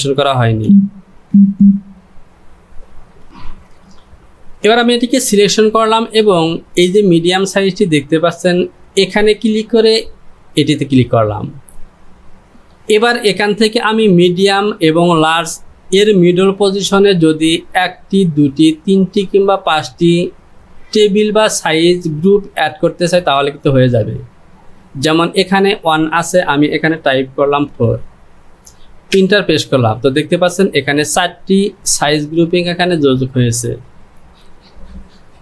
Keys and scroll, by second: 0.0-1.3 typing, 3.3 ctrl+z, 27.8 KP_4, 29.1 Return.